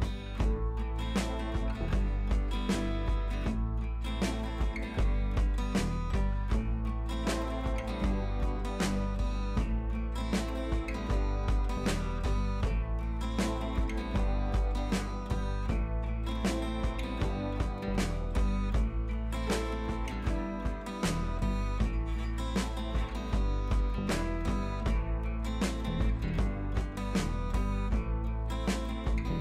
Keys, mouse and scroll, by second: 0.7 ctrl+z, 2.5-3.1 scroll up 2, 3.1 space, 3.3 click, 3.4-3.7 space, 3.9 scroll down 1, 5.3 scroll up 1, 5.7 scroll down 1, 7.7-8.1 click, 8.3-9.0 scroll up 1, 9.0 click, 9.3-9.9 scroll up 1, 9.9 click, 10.1-10.9 scroll up 1, 11.5 ctrl+shift+t, 14.6 ctrl+z, 17.3 ctrl+alt+shift+e, 20.9 click, 22.8 click, 26.5-29.4 drag.